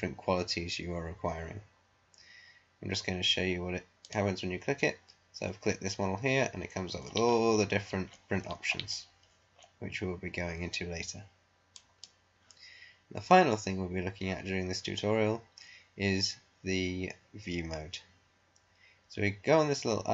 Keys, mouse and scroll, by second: 4.0 click, 7.0 scroll down 1, 7.5 scroll down 1, 9.2 scroll up 1, 9.5-9.9 scroll down 1, 11.6 click.